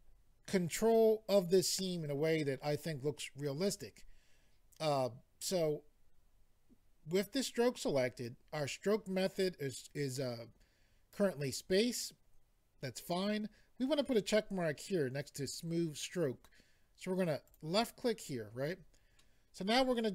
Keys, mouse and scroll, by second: 17.4 click, 17.6 click, 19.3 middle click.